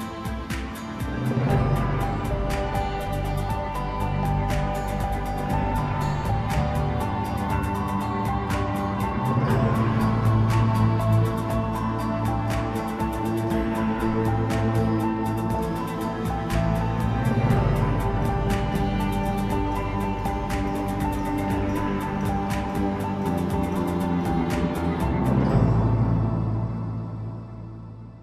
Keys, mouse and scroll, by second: 0.2 Tab, 0.6-1.8 middle drag, 1.8 a, 2.1 1, 2.7-5.7 middle drag, 10.2 scroll up 1, 10.4 scroll down 2, 10.7 middle click, 11.2 Tab, 11.8 KP_1, 13.2 shift+d, 15.7-16.7 scroll down 2, 16.7 KP_Divide, 17.6 scroll down 3, 17.8 middle click, 18.6 Tab, 19.5 KP_1, 20.1 3, 20.4-20.9 scroll up 1, 21.5-22.5 drag, 23.4 middle click, 24.3 scroll up 1, 24.9 shift+click, 25.5-27.0 middle drag, 27.0-28.2 shift+drag.